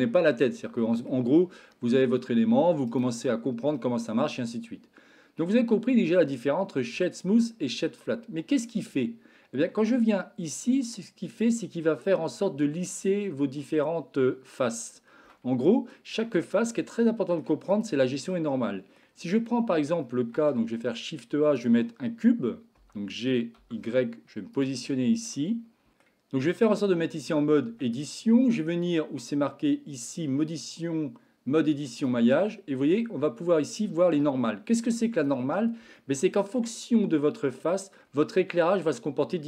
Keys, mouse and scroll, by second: 0.4-1.1 middle drag, 1.7-2.6 middle drag, 2.9-8.2 right drag, 10.6-11.5 middle drag, 15.4-15.9 shift+middle drag, 16.9-17.5 shift+middle drag, 17.6 click, 18.2-18.9 middle drag, 20.3 shift+a, 22.7 g, 24.8-25.3 shift+middle drag, 25.9 Tab, 25.9 middle click, 27.6 Tab, 31.9-35.4 drag, 36.0 shift+middle click, 36.9-38.0 middle drag.